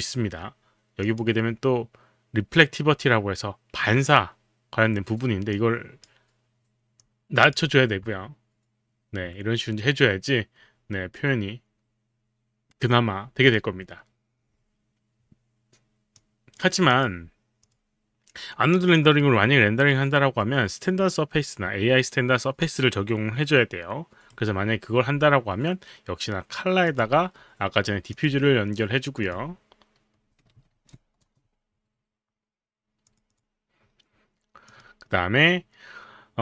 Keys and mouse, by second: 1.0 click, 5.6 click, 7.0 click, 16.2 click, 17.0 click, 17.6 click, 19.2 right click, 26.9 click, 28.1 click, 29.2 click, 30.8 ctrl+v, 31.2 Return, 33.0 click, 33.3 click, 34.7 click.